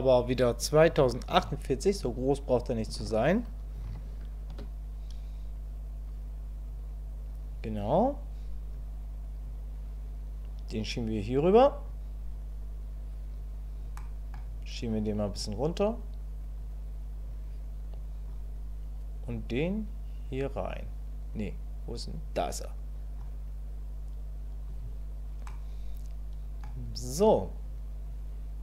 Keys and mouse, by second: 9.6-11.9 drag, 14.0 click, 14.9 click, 16.6 click, 17.9 click, 19.4-23.2 drag, 25.5-26.6 middle drag, 28.1 click.